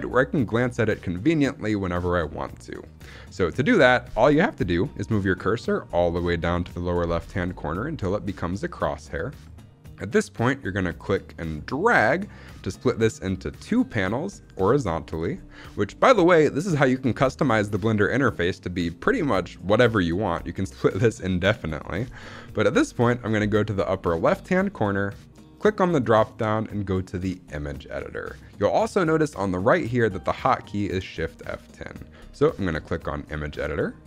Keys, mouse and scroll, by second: 10.9-14.4 drag, 25.5-33.4 drag.